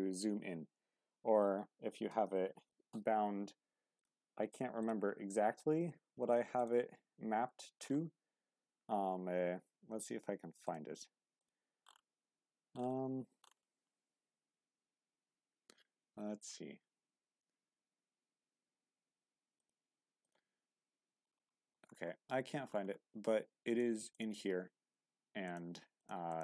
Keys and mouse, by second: 2.1 q, 3.9-5.1 drag.